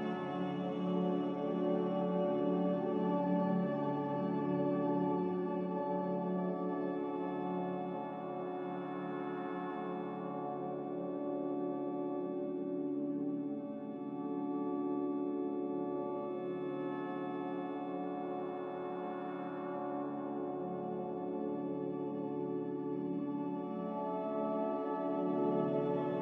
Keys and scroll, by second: 2.7 Escape, 11.5 z, 13.0 z, 21.1 4, 21.5 Return, 21.5 0, 23.2 n.